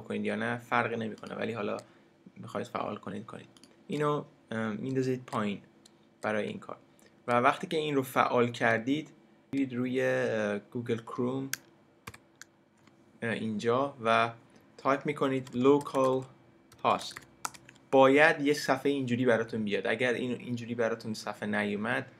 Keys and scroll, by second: 12.1 super+n, 15.1-17.7 typing.